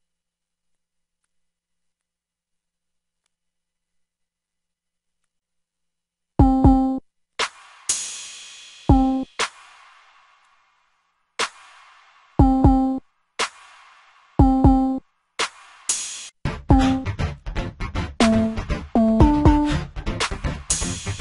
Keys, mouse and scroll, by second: 5.9 F1.